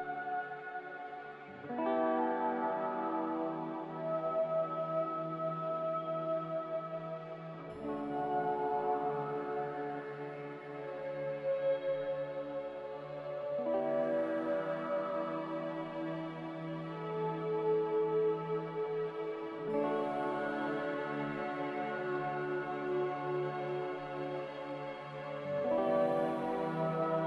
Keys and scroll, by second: 3.1 n, 6.4 a, 12.9 g, 14.7 Escape, 18.2-19.2 typing, 21.3 ctrl+c, 22.8 n, 25.2 a.